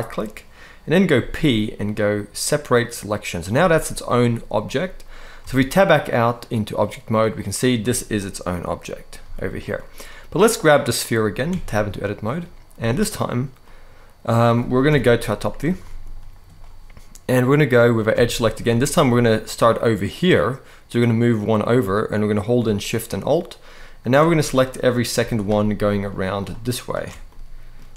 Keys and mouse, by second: 0.9 p, 3.3 z, 5.2 Tab, 9.0 g, 10.5 click, 11.3 Tab, 12.5 z, 13.4 middle click, 14.6 KP_7, 15.6 shift+middle click, 17.9 alt+a, 18.6 shift+click, 23.0 alt+shift+click, 23.7 alt+shift+click, 24.2 shift+middle click, 25.7 alt+shift+click, 27.0 shift+middle click.